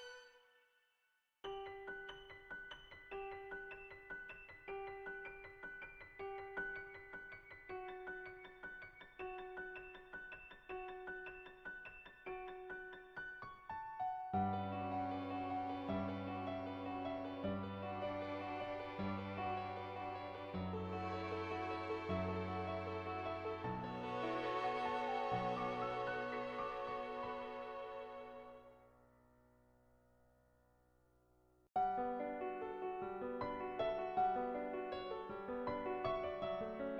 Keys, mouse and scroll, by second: 2.1 ], 2.3 click, 2.8 ctrl+z, 3.0 ], 3.1 click, 4.3-5.3 drag, 4.3-5.3 right drag, 7.5 click, 8.6 ], 8.7 ], 8.8 click, 9.3 ctrl+z, 9.3 [, 9.5 click, 10.1 ctrl+z, 10.3 click, 13.1 click, 13.7 ctrl+z, 13.9 [, 14.1 [, 14.2 [, 14.4 click, 15.4 [, 15.8 click, 17.2 ctrl+z, 17.3 [, 17.5 click, 18.6 ctrl+z, 18.6 [, 19.0-20.7 drag, 22.1 click, 22.7-25.0 drag, 26.6 click, 28.7 ], 29.2 click, 29.9-31.3 drag, 32.1 click, 32.5 click, 33.2-35.0 drag, 35.5 click, 35.9 click.